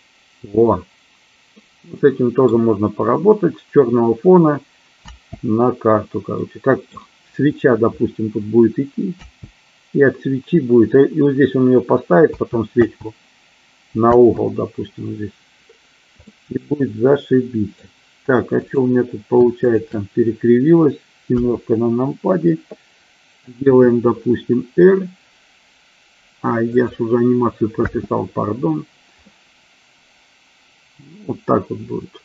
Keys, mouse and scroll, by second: 1.9-2.7 middle drag, 5.3 space, 6.6-7.1 middle drag, 9.6 space, 12.6 space, 13.1 space, 14.5 space, 16.5-18.0 middle drag, 20.0 shift+click, 21.6 KP_7, 24.0 r, 27.0 click, 28.1 space, 29.5-32.2 middle drag.